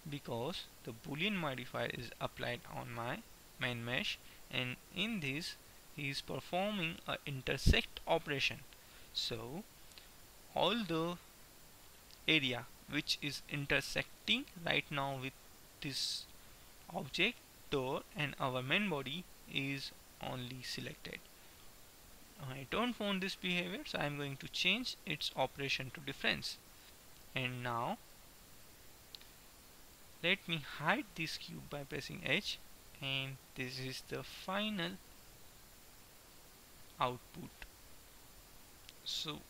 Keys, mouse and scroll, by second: 24.2-26.0 drag, 26.8 middle click, 27.8 middle click, 29.3-30.7 middle drag, 32.2 h, 33.0-34.7 middle drag, 35.7 middle click, 37.0-38.3 middle drag.